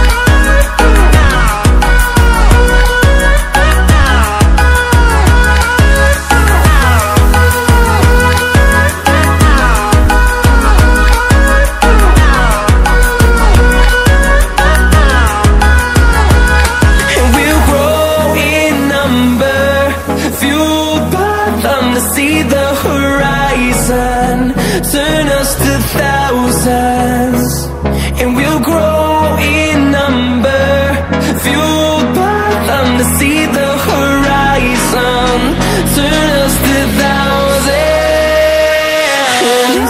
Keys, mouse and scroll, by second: 4.3-15.1 drag, 15.1 ctrl+alt+scroll up 1, 15.8 click, 16.8 ctrl+alt+scroll down 1, 18.1 click, 18.9 ctrl+alt+scroll down 1, 19.7-20.0 ctrl+alt+scroll up 1, 21.4 click, 23.2 ctrl+alt+scroll up 1, 23.7-25.2 drag, 26.0 ctrl+alt+scroll up 1, 27.7-35.9 drag, 38.9 ctrl+w.